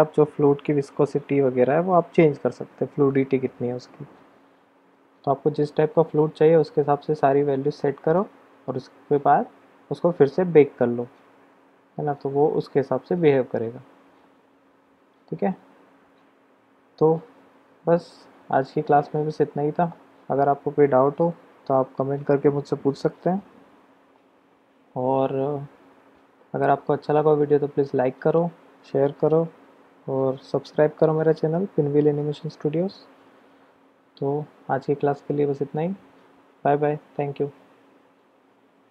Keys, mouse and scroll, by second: 17.4 click, 17.5 middle click, 17.9 click, 18.0-19.7 middle drag.